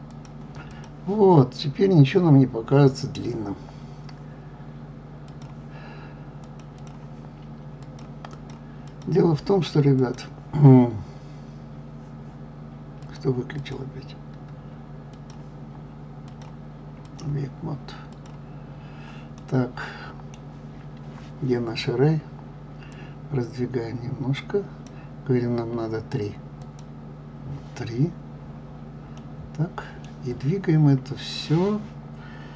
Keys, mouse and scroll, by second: 0.7 click, 5.3-6.5 drag, 6.8 click, 7.8 click, 8.3 click, 8.8 click, 10.0 click, 13.0 click, 13.6 click, 15.1 click, 16.3-18.2 drag, 19.3-22.4 middle drag, 22.9-25.9 drag, 26.6 click, 28.1-28.7 scroll down 1, 28.7-29.2 scroll up 1, 29.2-32.2 middle drag.